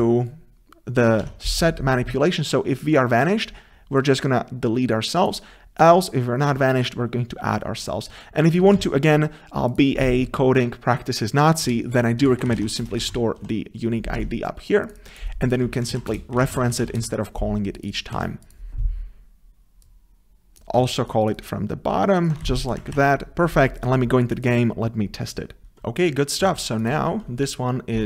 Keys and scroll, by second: 8.8 ctrl+c, 14.2 Tab, 18.2 ctrl+c, 22.4 ctrl+v.